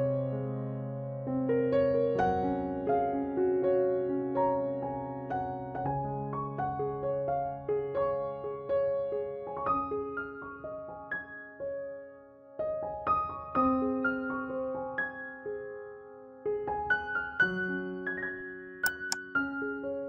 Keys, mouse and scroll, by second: 1.8 i, 3.6 middle click, 4.4-5.9 drag, 5.9 ctrl+b, 8.4 ctrl+s, 9.2 KP_3, 9.6 Tab, 10.2-11.5 middle drag, 10.4 z, 11.9 Tab, 13.7 ctrl+r, 16.0 ctrl+r, 17.7 ctrl+Tab, 18.8-19.9 middle drag.